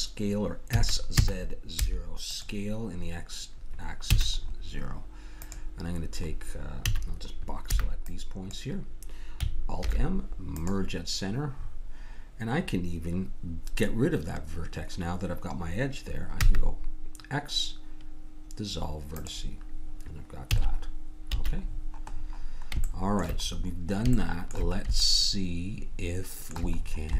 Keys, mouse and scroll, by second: 0.7 s, 4.0 a, 4.4 middle click, 5.4 click, 7.7 a, 7.7 b, 9.8 alt+m, 11.6 middle click, 16.4 x, 20.4 a, 21.2 a, 26.8 middle click.